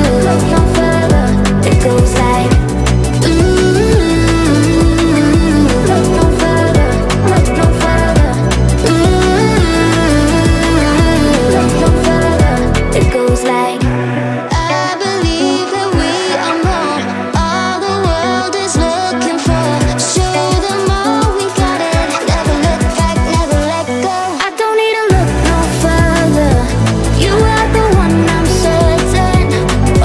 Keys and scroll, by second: 0.0-1.0 typing.